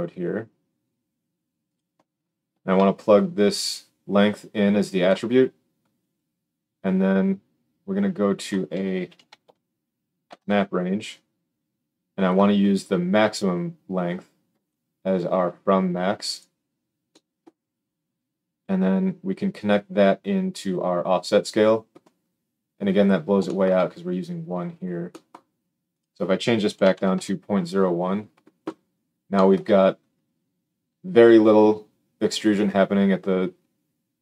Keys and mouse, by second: 1.7-3.6 middle drag, 3.6-12.2 drag, 12.2-14.6 middle drag, 14.6-34.2 drag.